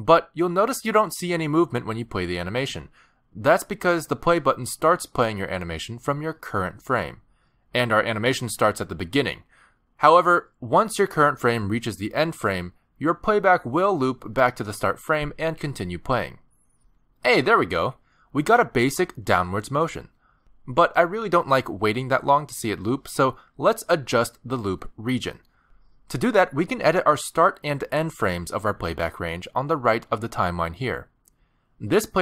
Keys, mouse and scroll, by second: 19.5 space, 21.1 click.